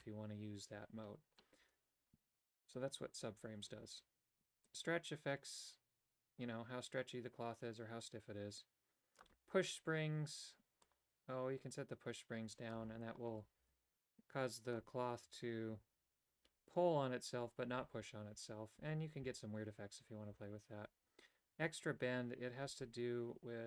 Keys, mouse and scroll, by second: 4.7-9.4 drag, 10.9-12.8 drag, 13.4 right click, 13.7 g.